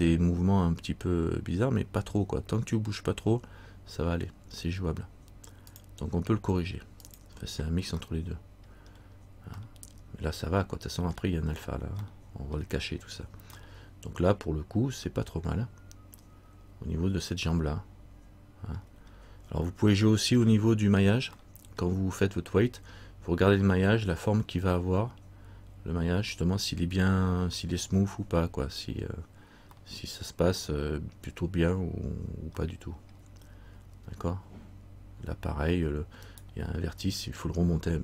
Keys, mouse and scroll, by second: 7.3 click, 8.2 middle click, 9.1-9.6 scroll down 1, 9.8 middle click, 12.2 middle click, 13.8 middle click, 19.2-20.5 scroll up 2, 20.6 shift+middle click, 21.5 middle click, 22.7-23.7 scroll up 1, 29.9 middle click, 32.8 middle click, 36.4 right click.